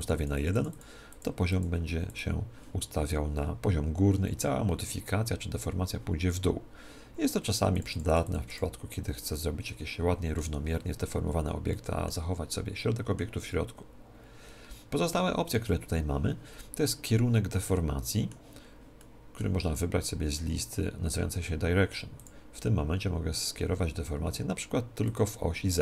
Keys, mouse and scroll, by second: 7.7-10.2 drag, 9.6 right click, 9.8 middle click, 9.9 right click, 10.0-11.6 middle drag, 11.6 scroll down 1, 11.7-14.3 middle drag, 17.6-20.9 middle drag, 22.1-24.1 drag.